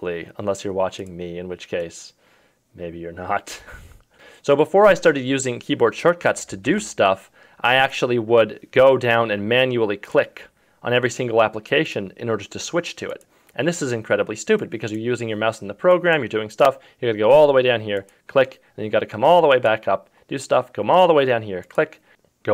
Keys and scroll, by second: 6.7 super+d.